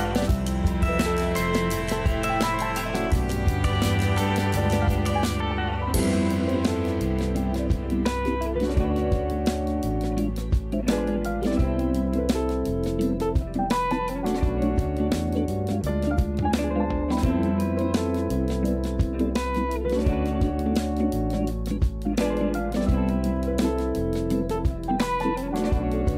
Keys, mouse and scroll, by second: 0.5-1.8 shift+middle drag, 1.8 scroll down 2, 2.2 shift+middle click, 2.6-3.4 scroll up 4, 3.4 Tab, 3.7 click, 4.3 KP_1, 6.1-11.4 shift+middle drag, 12.0 Tab, 12.5 a, 12.7 a, 13.1 ctrl+r, 14.3 a, 14.4 a, 14.8 ctrl+r, 16.1 g, 17.4 a, 17.6 a, 18.3 shift+middle click, 18.8 scroll up 3, 19.3 a, 19.5 a, 19.8 1, 20.0 click, 20.5 shift+click, 20.8-21.3 scroll up 2, 21.3 s, 25.8-26.1 scroll down 8.